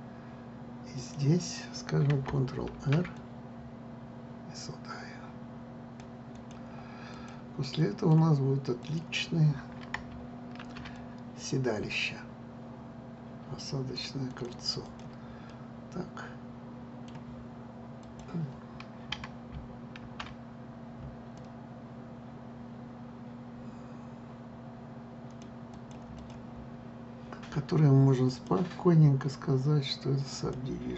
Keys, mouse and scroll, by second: 1.7 click, 3.4 ctrl+r, 7.0 click, 7.8 click, 8.3-9.5 middle drag, 9.5 click, 11.3 ctrl+r, 15.0 click, 15.5 click, 16.2-18.7 middle drag, 18.7 click, 20.7 ctrl+r, 26.9 click, 27.4 scroll down 2, 28.9-30.9 drag.